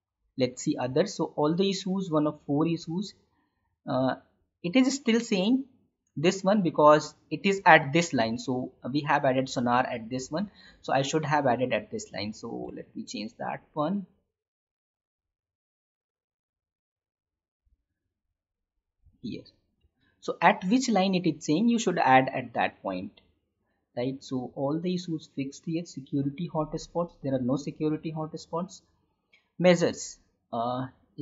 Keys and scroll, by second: 12.7 alt+Tab, 17.6 ctrl+x, 18.9 ctrl+v, 20.0 Tab.